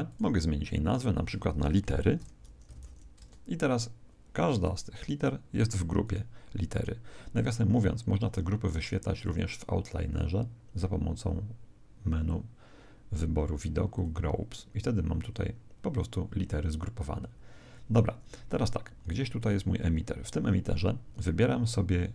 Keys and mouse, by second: 0.0 right click, 0.9 click, 5.0-8.6 right drag, 9.2 click, 18.8 z, 19.4 right click, 19.9 z.